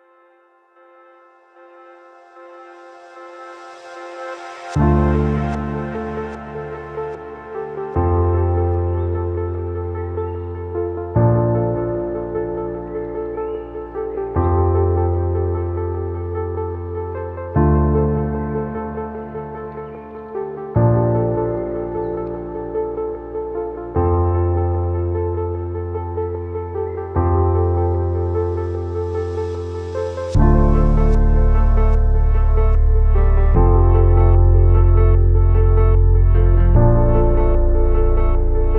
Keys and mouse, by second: 1.1 shift+click, 1.9 shift+click, 3.5 ctrl+r, 3.9 a, 4.1 b, 4.9 g, 6.2 a, 6.5 b, 7.0 g, 8.8 s, 11.0 a, 11.3 b, 12.2 g, 13.7-14.1 shift+drag, 14.3 a, 14.5-15.9 shift+drag, 16.3 z, 16.6 click, 17.5 a, 18.1 click, 20.6-21.9 drag, 22.5 shift+click, 23.6 click, 25.1-26.6 shift+drag, 28.0 shift+click, 29.2 click, 29.9-30.7 middle drag, 31.1 shift+middle click, 31.7 e, 32.4-33.8 drag, 34.6-37.6 drag, 38.3 click.